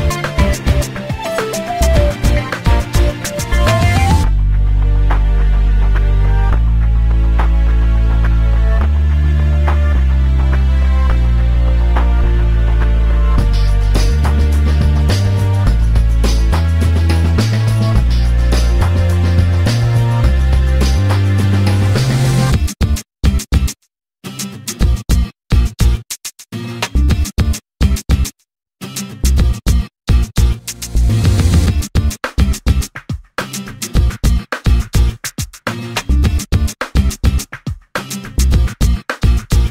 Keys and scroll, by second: 0.7 space, 4.5 Escape, 7.1 m, 20.9 ctrl+z, 26.7 l, 31.7 5, 31.9 0, 38.3 5, 38.5 0.